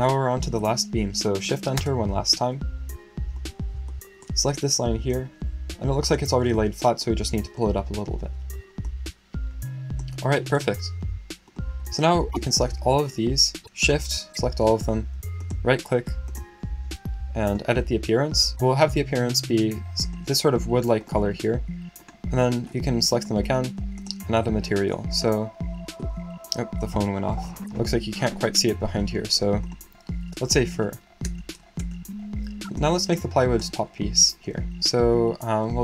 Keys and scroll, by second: 27.4-28.1 typing, 30.2-31.2 typing.